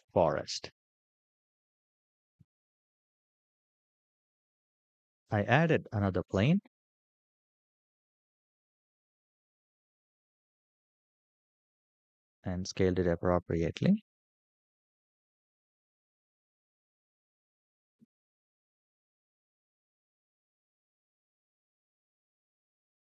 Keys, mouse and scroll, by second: 0.8-1.6 shift+middle drag, 1.8-2.5 scroll down 2, 2.5 shift+middle drag, 5.8 shift+a, 8.6 g, 11.4 s, 13.3-15.3 right drag, 14.8 s, 17.3 click, 18.1 g, 21.3 shift+middle drag, 21.7 click, 22.4 ctrl+a.